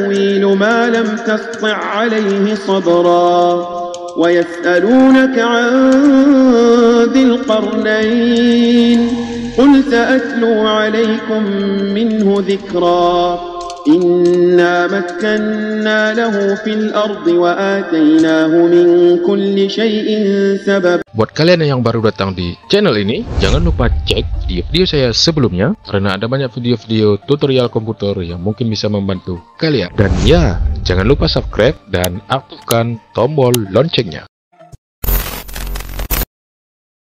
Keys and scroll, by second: 0.1 space, 1.5 space, 3.8 space, 5.8 space, 8.3 space, 8.9 space, 12.3 space, 15.0 space, 17.1 ctrl+a.